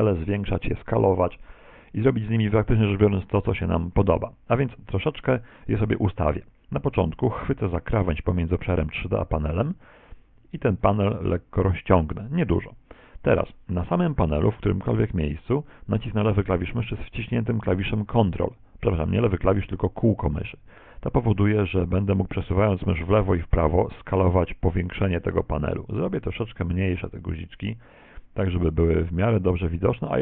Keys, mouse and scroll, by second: 9.5 click, 20.4 ctrl+middle click.